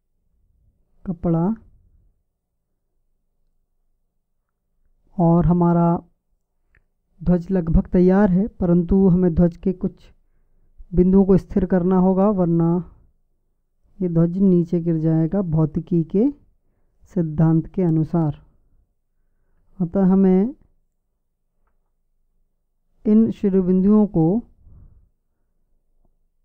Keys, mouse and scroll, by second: 1.5-3.3 drag, 14.7 Tab, 22.7 a, 24.8 b.